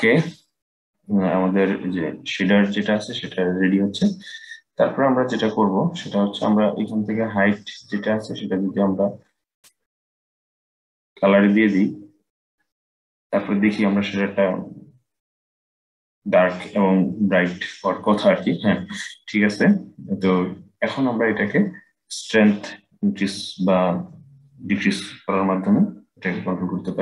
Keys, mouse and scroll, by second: 6.6 click, 22.1-25.2 drag.